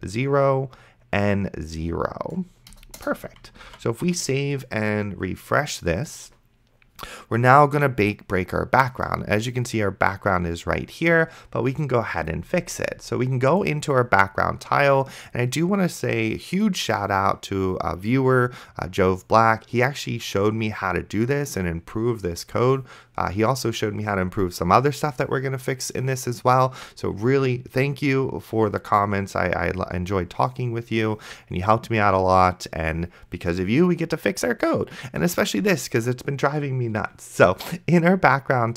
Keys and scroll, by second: 3.9 ctrl+s.